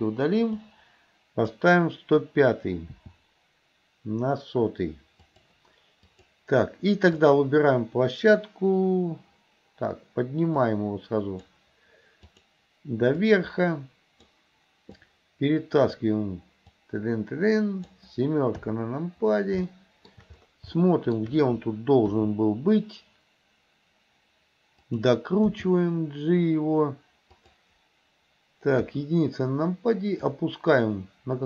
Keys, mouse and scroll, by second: 0.6-1.6 drag, 3.0 g, 6.2 click, 7.2 click, 10.7 click, 12.3 click, 13.4-14.4 drag, 15.0-16.1 drag, 16.9-18.0 drag, 18.6 KP_7, 19.8 shift+middle click, 20.1 shift+scroll down 1, 20.8 shift+scroll up 1, 20.9 shift+middle click, 22.2 r, 25.6 g, 28.9 KP_1, 30.3-31.4 drag.